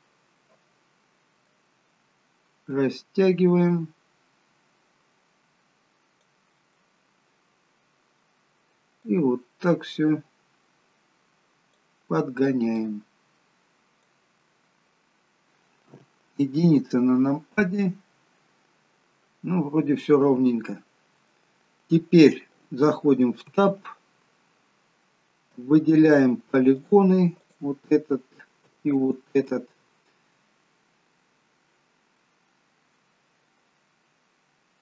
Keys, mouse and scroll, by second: 0.4 middle click, 2.7 click, 6.8 middle click, 9.1 click, 12.8 click, 14.4 middle click, 15.4 middle click, 15.4-15.9 scroll down 3, 15.9 KP_1, 17.4-17.8 scroll up 3, 23.4 Tab, 24.4-26.5 scroll up 1, 26.5 scroll up 2, 26.8 click, 27.4 click, 29.0 shift+click, 29.5 shift+click, 32.2 middle click.